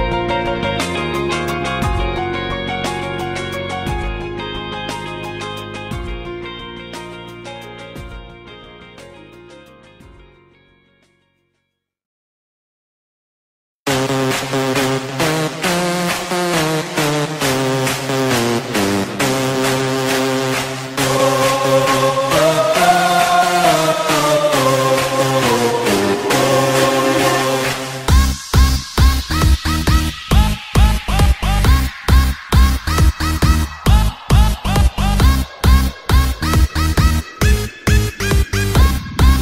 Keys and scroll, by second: 1.8 space, 3.6 ctrl+z, 8.4 space, 13.1 space, 17.7 space, 18.6 ctrl+z, 19.0 ctrl+z, 19.3 ctrl+z, 20.2 ctrl+z, 21.0 ctrl+z, 22.0 ctrl+z, 24.5 space, 27.7 ctrl+z, 29.0 ctrl+z, 30.1 ctrl+z, 30.6 ctrl+z, 30.8 ctrl+z, 31.7 ctrl+z, 32.5 ctrl+z, 32.7 ctrl+z, 33.0 space, 36.9 ctrl+z, 37.4 ctrl+z, 38.7 ctrl+z.